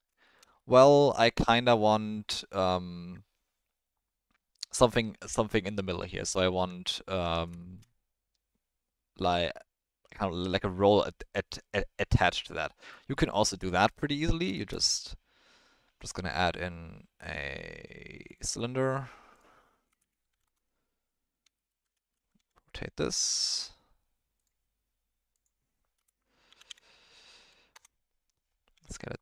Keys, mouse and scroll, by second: 0.2 shift+middle drag, 0.5-1.2 middle drag, 6.5 Tab, 7.2 Tab, 7.6 shift+middle drag, 12.7 middle click, 14.1 middle drag, 14.6 shift+a, 19.3-20.4 drag, 22.4 r, 25.3-27.7 drag, 28.7 s.